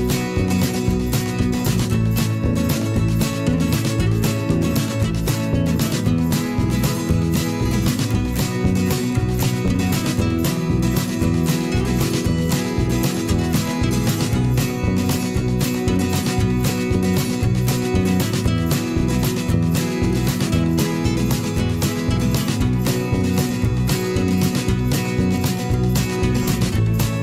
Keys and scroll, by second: 0.8 ctrl+a, 2.2 shift+Left, 2.6 shift+Down, 3.0 Left, 13.9 v.